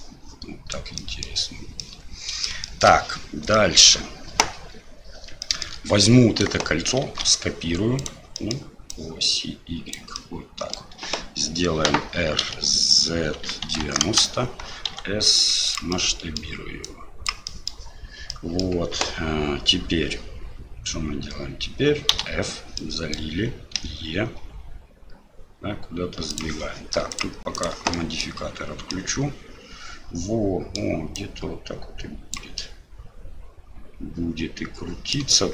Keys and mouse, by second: 0.0 middle click, 1.1 middle click, 1.9 middle click, 2.7 shift+middle click, 3.5 middle click, 5.4 shift+middle click, 7.0 shift+d, 8.5 click, 9.0 click, 10.3 middle click, 12.4 r, 14.9 s, 16.0 middle click, 16.8 click, 17.5 middle click, 18.4 middle click, 22.8 middle click, 27.6 click, 28.0 middle click, 29.0-30.8 middle drag, 31.2-32.3 drag, 32.5-35.1 middle drag.